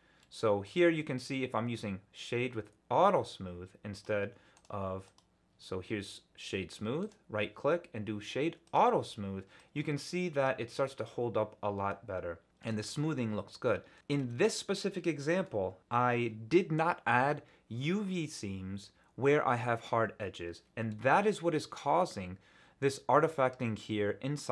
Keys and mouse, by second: 0.8-3.7 drag, 10.8-12.6 middle drag, 14.0 middle click, 14.2 Tab, 14.9 middle click, 15.3 middle click.